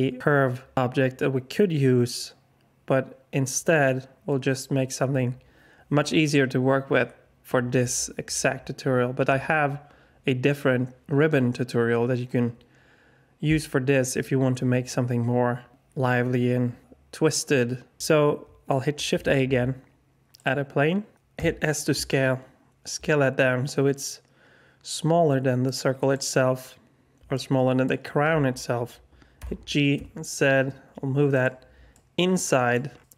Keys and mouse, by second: 19.1 shift+a, 21.3 s, 27.3-27.8 alt+drag, 29.3 g, 31.9-32.7 drag, 33.0-33.1 alt+drag.